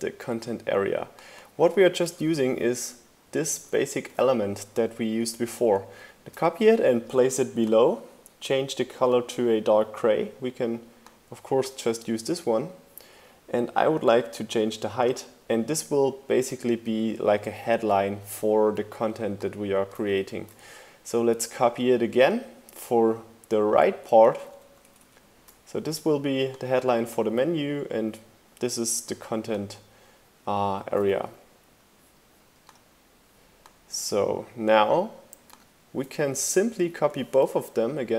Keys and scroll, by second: 1.7 super+c, 3.2 super+v, 4.5 shift+Down, 19.9 super+c, 20.1 super+v, 20.3 shift+Right, 24.0 shift+Left, 31.0 ↺, 36.9 super+c.